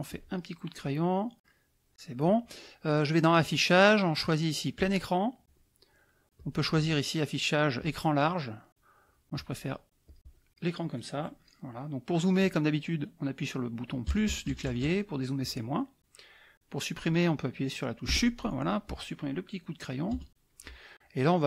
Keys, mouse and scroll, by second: 0.1 click, 3.4 click, 4.8 click, 6.3 click, 7.8 click, 9.1 click, 10.0 click, 14.1 KP_Add, 15.4 KP_Subtract, 18.1 Delete, 20.1 KP_Add, 20.9 middle click.